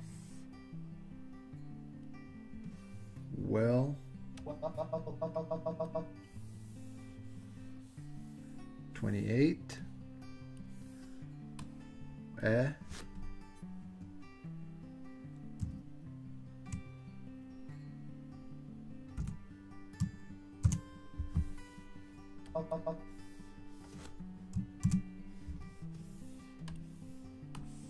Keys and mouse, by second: 4.5-6.0 drag, 9.9-10.8 drag, 11.7-18.6 drag, 19.2 l, 20.7 super+c, 22.6 click, 24.9 super+v, 26.8 click, 27.6-27.8 drag.